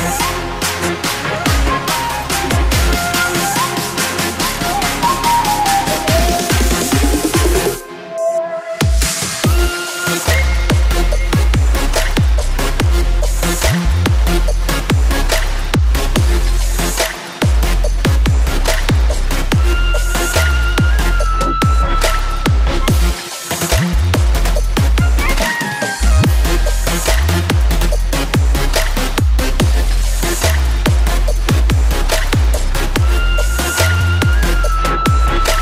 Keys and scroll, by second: 29.5 ctrl+s, 29.5 ctrl+z.